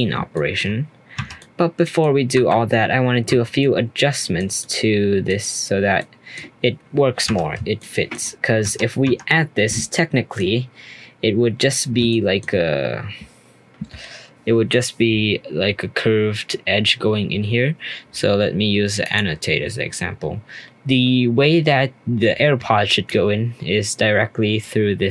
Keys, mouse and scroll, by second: 0.3 shift+middle drag, 0.6-1.1 shift+scroll up 2, 1.1 Tab, 1.4 middle click, 2.3 3, 3.3 Tab, 3.6-5.5 middle drag, 5.5-5.9 scroll up 1, 5.9-7.2 middle drag, 7.2 Tab, 7.7 shift+middle click, 8.2-8.6 scroll up 1, 8.6 Tab, 9.0 Tab, 9.9 shift+middle click, 10.4 scroll up 2, 10.7-12.1 scroll down 2, 12.1-15.1 shift+middle drag, 17.2-19.0 scroll down 1, 19.0-22.1 drag, 23.1-25.1 drag.